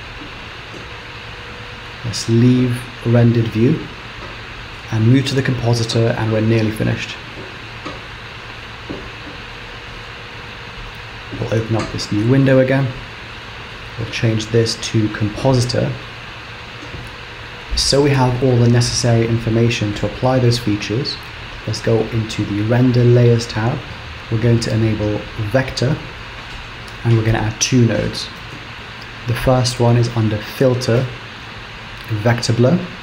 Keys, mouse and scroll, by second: 1.1 z, 8.1 click, 11.3 click, 13.3 click, 17.4 click, 22.3 click, 24.1 scroll down 2, 25.5 click.